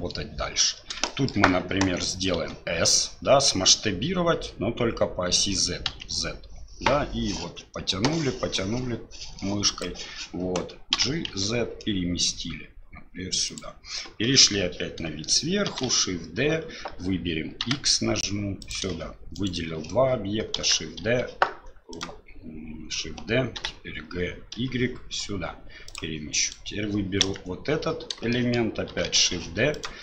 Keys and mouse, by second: 1.1 shift+middle drag, 2.4 s, 10.9 g, 14.3 KP_7, 15.7 shift+d, 19.3 shift+click, 20.5 shift+d, 23.5 g, 26.4 click, 27.2 KP_1, 28.3 shift+click, 28.9 shift+d.